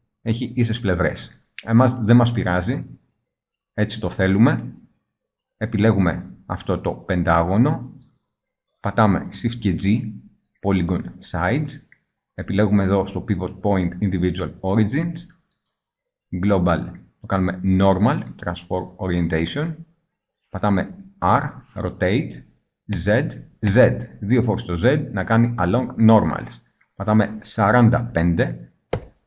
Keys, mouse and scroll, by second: 2.5-4.3 middle drag, 7.9-8.9 middle drag, 9.7 shift+g, 21.4 r, 25.1 right click.